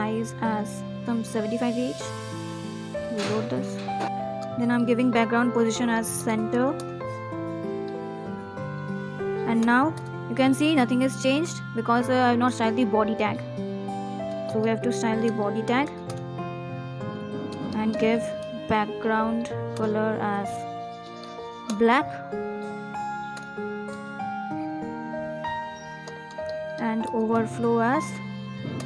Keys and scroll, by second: 0.4 ctrl+s, 0.9 Right, 1.2 Down, 4.8 ctrl+s, 9.4 Down, 9.6 Up, 9.9 Return, 11.5 Return, 16.0 Return, 16.9 Down, 24.0 Return.